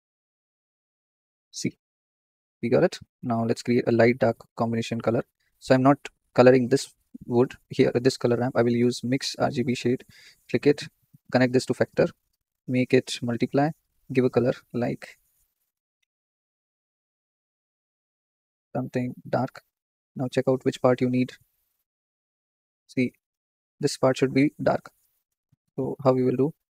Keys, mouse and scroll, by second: 0.1 scroll down 3, 0.6-5.6 middle drag, 5.6-10.1 drag, 10.8-13.6 drag, 19.8-20.4 scroll up 3, 19.9-20.3 middle drag, 20.4-22.9 shift+middle drag, 22.9-25.9 drag.